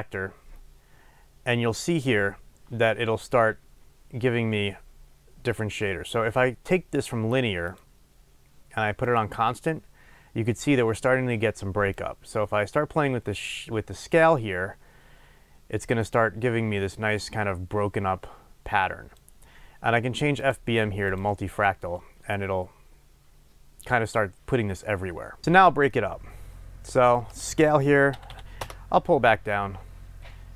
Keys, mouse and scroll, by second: 25.4-27.0 middle drag, 26.0-27.0 scroll up 2, 27.0-30.5 drag, 28.6 Return.